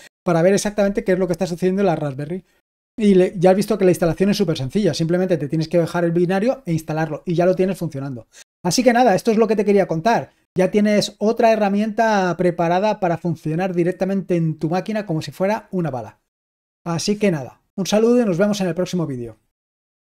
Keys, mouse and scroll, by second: 20.0 click.